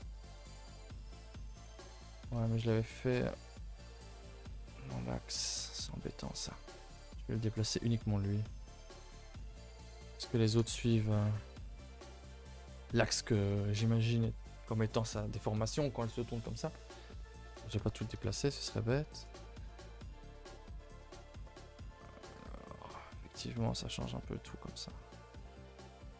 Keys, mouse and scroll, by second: 5.6 click, 9.7 middle click, 10.2-11.2 scroll up 7, 10.6 shift+middle click, 11.2-12.5 middle drag, 12.5 a, 12.6 a, 13.0 ctrl+s, 13.2-16.3 middle drag, 17.5 KP_0, 20.8 click, 21.9 click, 23.6-26.1 drag.